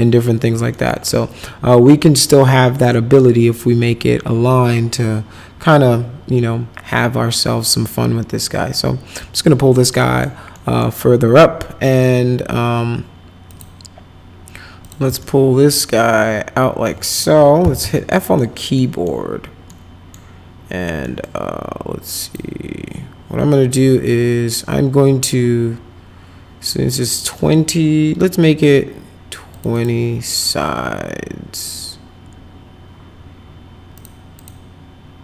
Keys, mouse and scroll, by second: 0.7 middle click, 2.4-9.7 drag, 10.0 middle click, 10.5 middle click, 13.5 click, 14.8 click, 15.2-16.8 alt+middle drag, 17.0 middle click, 17.4-18.3 typing, 18.1 middle click, 18.7 middle click, 19.7 middle click, 21.0 middle click, 22.2 click, 27.0 middle click, 29.5 click, 29.7 click, 33.9 click, 34.3 click.